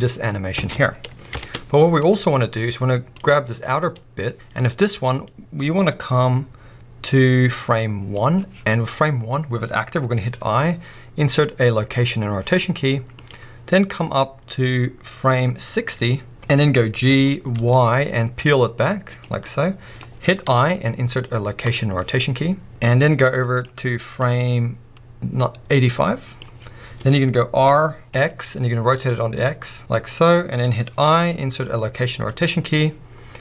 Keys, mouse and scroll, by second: 0.6 space, 1.3 shift+Left, 2.2 middle click, 3.1-4.9 drag, 8.1-19.2 drag, 19.4-22.7 middle drag, 22.7-30.7 drag, 27.7 r.